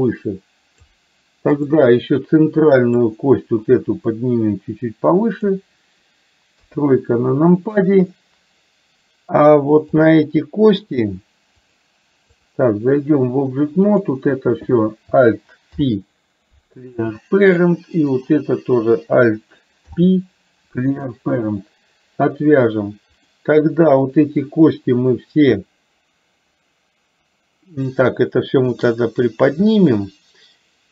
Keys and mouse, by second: 1.6 click, 3.1 click, 4.2-5.6 drag, 6.6 KP_3, 10.1 click, 11.7-12.9 drag, 13.9 click, 15.7 alt+p, 18.2 click, 19.8 alt+p.